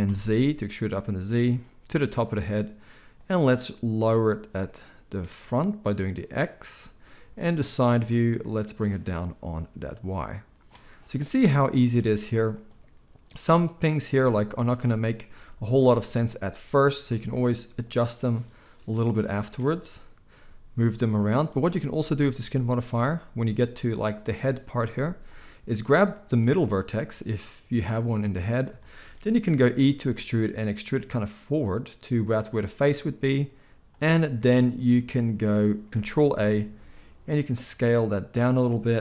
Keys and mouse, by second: 2.0-3.2 middle drag, 3.2-21.4 drag, 14.1 z, 15.3 z, 20.3 g, 21.4-25.8 middle drag, 24.9 z, 25.8-32.5 drag, 29.9 e, 32.5-39.0 middle drag, 33.7 z, 35.9 ctrl+a, 36.2 ctrl+a.